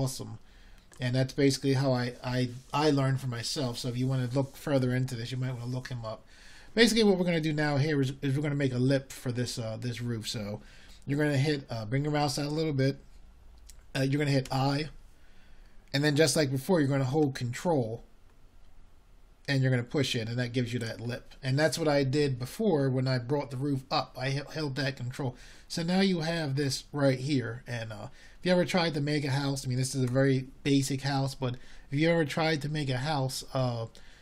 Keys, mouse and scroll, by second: 21.7 |.